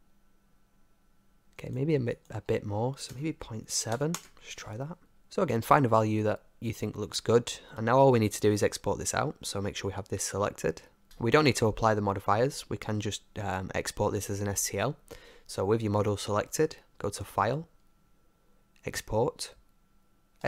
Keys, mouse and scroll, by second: 1.6-3.9 drag, 5.2-7.7 middle drag, 7.7 ctrl+s, 17.1-19.4 drag.